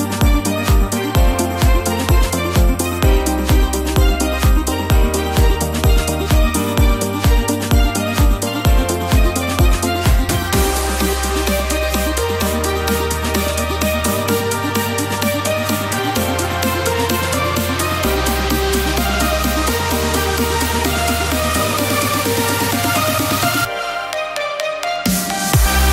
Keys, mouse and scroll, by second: 1.4 scroll up 1, 1.5-2.8 scroll, 3.2-3.5 scroll, 4.8 click, 6.4 click, 14.4-15.7 drag, 14.5 1, 20.7 click, 20.7 3, 20.7 1, 24.4 3.